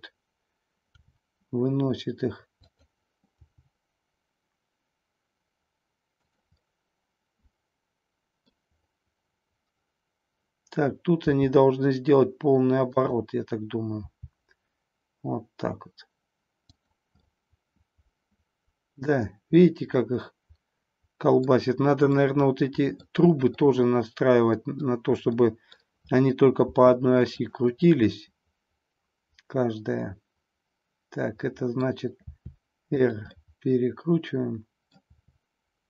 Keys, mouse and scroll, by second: 0.8 r, 3.5 g, 6.2 click, 6.6-8.5 middle drag, 11.2 r, 13.0 click, 14.0 g, 16.8 click, 17.1-21.5 middle drag, 22.1-23.1 middle drag, 23.5-24.8 middle drag, 25.2 middle click, 26.6 r, 27.4 click, 27.7-31.7 middle drag, 32.2 r, 33.1 click, 33.3-34.9 middle drag.